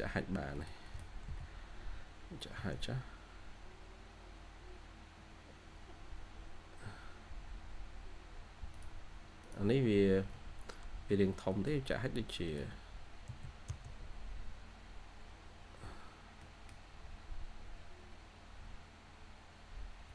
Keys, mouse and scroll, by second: 0.2 scroll down 1, 0.4 middle click, 1.0 scroll down 1, 1.2 h, 3.3 scroll, 3.3-4.4 scroll up 3, 3.6 h, 4.0 h, 4.4 h, 4.7-5.1 scroll up 1, 5.1 h, 5.8-6.5 scroll up 1, 6.5 h, 9.7-10.2 scroll down 1, 11.0 Escape, 11.2 Escape, 11.4 middle click, 13.2 typing, 14.2-14.5 scroll up 1, 14.5 typing, 16.0 scroll up 1, 16.2 typing, 16.3 middle click, 19.0-20.1 scroll up 1.